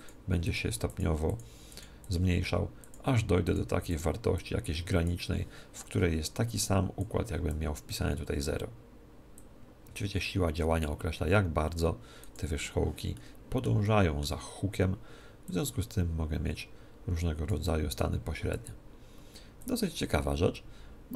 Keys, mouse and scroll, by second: 7.0 click, 9.4-11.5 drag, 12.2 click, 13.2-15.4 middle drag, 15.4 click, 18.0-21.1 drag.